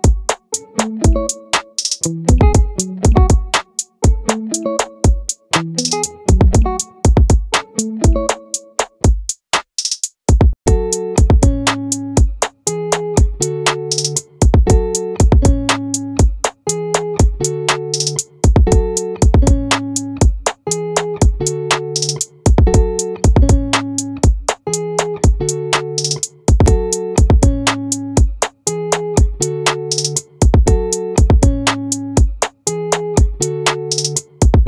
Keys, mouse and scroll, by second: 2.7-4.1 right drag, 4.1-6.1 middle drag, 9.5-11.9 middle drag, 12.2 middle click, 15.9-17.1 middle drag, 17.1-18.5 right drag, 22.1-23.7 drag, 24.2 middle click, 25.9 a.